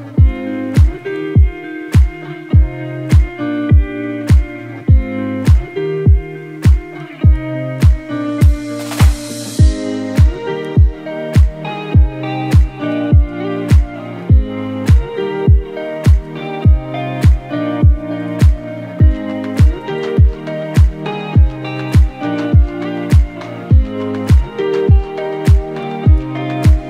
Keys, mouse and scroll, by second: 2.2-2.9 scroll up 1, 3.3 ctrl+c, 4.0 ctrl+f, 5.6 right click, 6.6-14.4 drag, 15.2 click, 18.2 scroll up 1, 19.1 scroll down 1, 21.0 click.